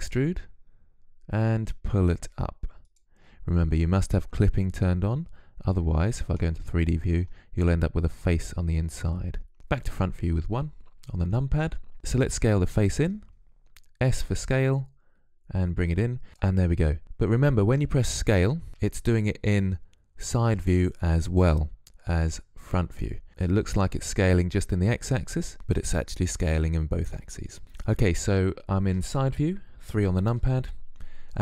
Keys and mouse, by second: 5.7 middle click, 9.5 KP_1, 12.0 s, 18.5 KP_3, 21.7 KP_1, 25.5 KP_3.